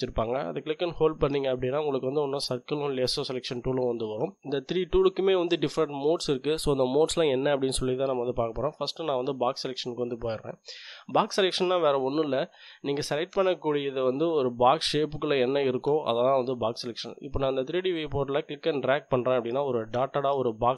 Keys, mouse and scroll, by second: 0.4-9.5 drag, 11.8-13.1 drag, 18.1-20.7 drag.